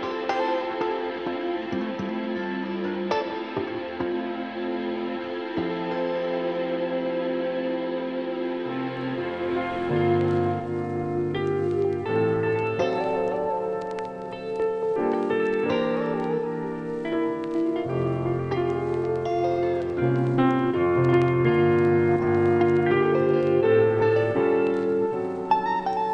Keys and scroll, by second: 3.1 [, 7.4 [, 11.3 ], 14.3 [, 18.3 ], 21.1 [, 23.9 ].